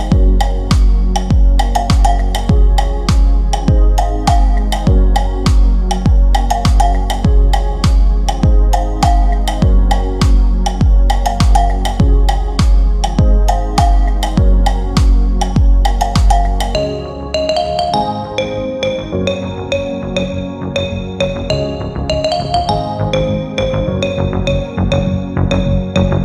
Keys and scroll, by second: 17.6 F3, 17.9 Escape.